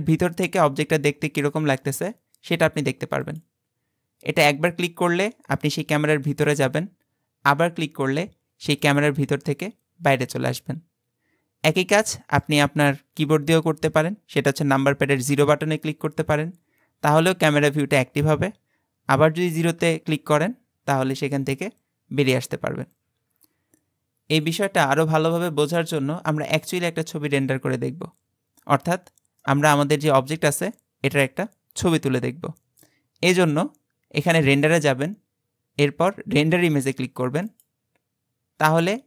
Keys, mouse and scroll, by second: 3.3 click, 8.9 click, 11.7-14.9 shift+middle drag, 15.3 KP_0, 19.7 KP_0, 29.4-32.5 middle drag, 34.5-38.2 drag.